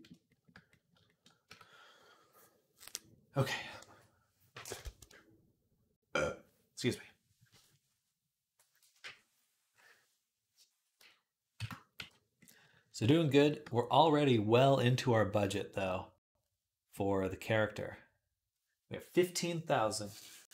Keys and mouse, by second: 1.3 Tab, 13.2 shift+click, 13.4-15.3 middle drag, 15.3-20.5 right drag.